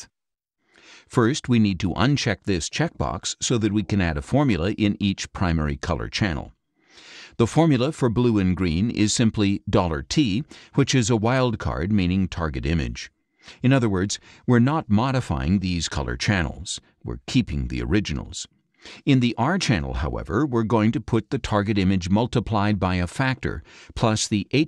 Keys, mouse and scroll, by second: 1.9 click, 4.9 click, 5.8 click, 8.6 click, 9.7 shift+4, 10.1 shift+t, 11.4 click, 11.8 shift+click, 12.3 shift+4, 12.8 shift+t, 19.4 click, 21.4 shift+4, 21.9 shift+t, 22.2 space, 22.9 space, 24.1-24.6 typing.